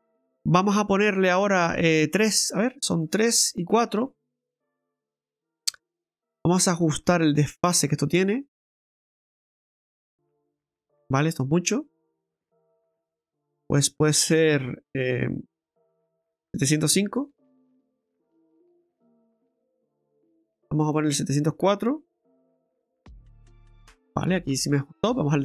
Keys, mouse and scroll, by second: 2.9 click, 3.5 click, 4.5 middle click, 5.0-5.5 scroll up 4, 5.7 shift+middle click, 6.2-7.0 scroll up 5, 7.0 middle click, 10.2 click, 12.3 click, 13.2 click, 19.2 scroll down 1, 20.8 click, 24.5-24.9 scroll down 4, 25.1 shift+middle click.